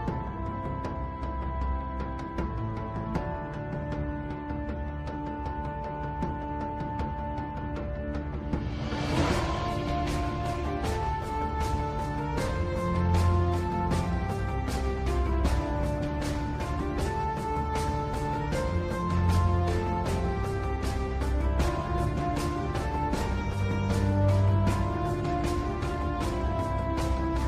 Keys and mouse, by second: 1.5 g, 8.4-10.0 drag, 11.4 g, 19.2 click, 21.4 g, 26.6 g.